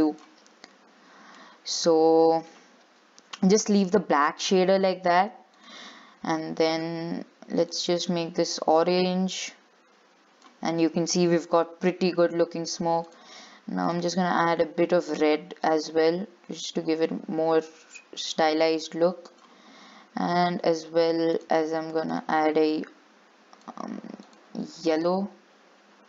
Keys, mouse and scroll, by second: 1.7-2.1 scroll down 4, 2.1-5.3 shift+middle drag, 5.3-6.9 drag, 13.3-14.7 drag, 21.6-25.4 drag.